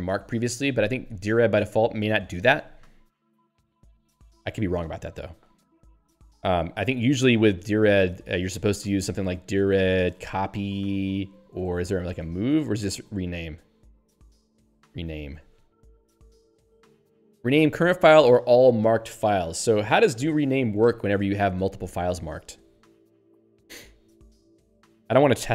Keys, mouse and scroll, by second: 8.5 super+e, 9.1 alt+x, 9.3-12.8 typing, 14.0-15.8 typing.